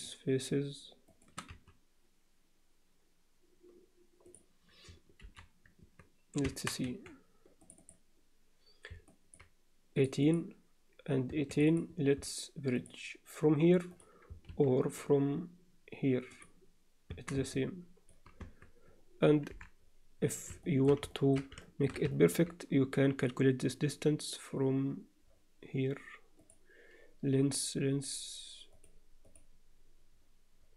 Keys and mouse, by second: 1.5 x, 5.2 alt+h, 5.8 Tab, 6.5 Tab, 6.9 2, 7.7 click, 9.1 alt+middle click, 9.9 click, 10.3 click, 11.5 shift+click, 12.7-14.0 drag, 14.5 ctrl+z, 14.9-16.5 right drag, 17.1 Tab, 17.5-18.1 alt+middle drag, 18.4 Tab, 19.5 KP_7, 20.6 shift+middle click, 21.1 ctrl+alt+middle click, 21.6 shift+middle click, 22.1 ctrl+alt+middle click, 26.5-30.7 drag.